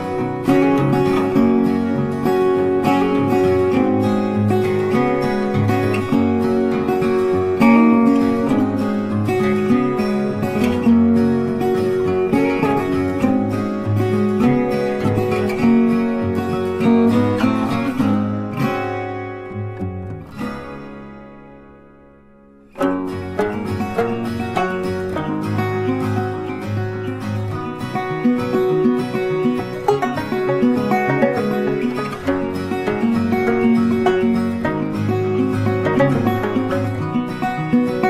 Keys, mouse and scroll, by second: 0.1 ctrl+click, 1.7 space, 2.7 ctrl+click, 3.5 space, 4.3 ctrl+click, 5.1 space, 6.1 ctrl+click, 7.2 ctrl+space, 7.4 ctrl+click, 7.5 ctrl+space, 8.1 alt+scroll up 1, 9.5 ctrl+click, 14.0 Delete, 17.5 space, 17.6 ctrl+click, 18.1 double click, 19.8 Delete, 20.9 double click, 21.7 shift+click, 22.1 ctrl+space, 22.2 ctrl+click, 22.3 ctrl+click, 24.2 Delete, 25.1 Delete, 25.7 double click, 27.7 ctrl+space, 27.7 ctrl+click, 27.9 ctrl+space, 28.5-29.1 alt+scroll up 1, 30.4 Delete, 32.4 space, 32.7 ctrl+click, 34.0 ctrl+click, 34.8 alt+scroll up 1, 35.0 space, 37.1 alt+scroll up 1, 37.3 space, 37.6 ctrl+click.